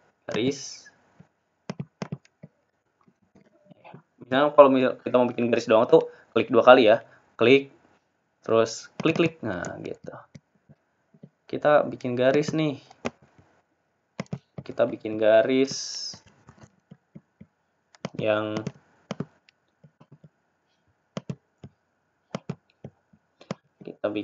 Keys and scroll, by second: 5.3 ctrl+z, 21.3 ctrl+shift+a.